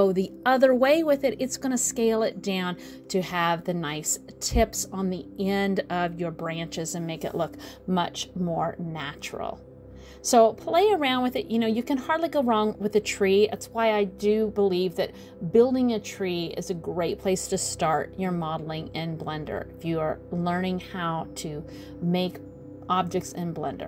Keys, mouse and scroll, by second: 3.3 middle click, 3.9 middle click, 4.3 scroll down 1, 4.3 shift+middle click, 5.5 click, 6.6 ctrl+a, 8.9 middle click, 10.3 click, 11.4 ctrl+a, 13.1-13.7 scroll down 4, 13.3 middle click, 14.2 middle click, 14.6-15.5 scroll up 1, 15.5 click, 16.5 ctrl+a, 18.3 middle click, 19.2 middle click, 20.3 middle click, 20.9 middle click, 21.2-21.7 scroll up 3, 21.7 shift+middle click, 22.1 middle click, 22.7 middle click.